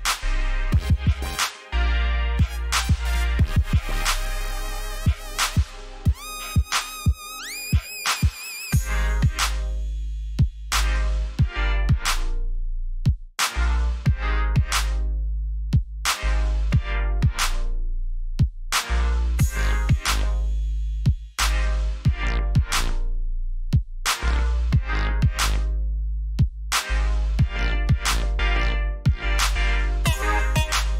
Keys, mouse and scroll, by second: 1.5 alt+scroll up 1, 2.5-3.3 alt+scroll down 4, 3.8 click, 5.4 scroll up 1, 7.7 b, 9.3 click, 11.1 Escape, 11.6 alt+right click, 15.3 alt+scroll down 1, 16.3 alt+scroll up 1, 16.9 alt+scroll up 2, 17.8 scroll down 1, 22.2 click, 23.4 ctrl+z, 27.7 click, 29.2 alt+right click.